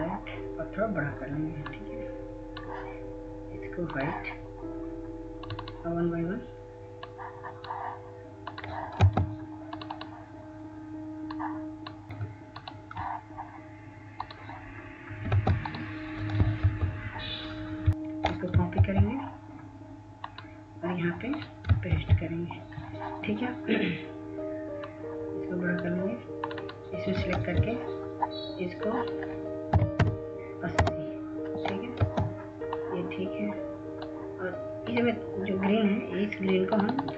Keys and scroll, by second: 10.5 ctrl+space, 16.9 ctrl+space, 18.0 ctrl+space, 18.1 ctrl+z, 20.5 ctrl+c, 23.6 ctrl+v, 29.1 ctrl+a, 31.2-34.0 typing.